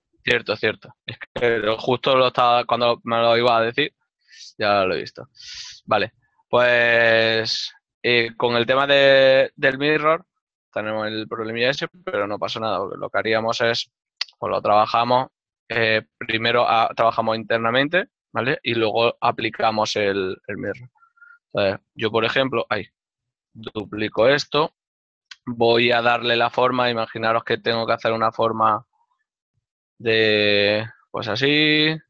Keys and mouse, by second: 5.2 ctrl+middle click, 10.4 ctrl+middle click, 14.0 KP_7, 15.4-16.1 typing, 17.4 right click, 19.9 middle click, 23.4 ctrl+middle click, 23.5 right click, 24.8 shift+middle click, 26.6 middle click, 27.1 shift+middle click, 28.0 ctrl+click.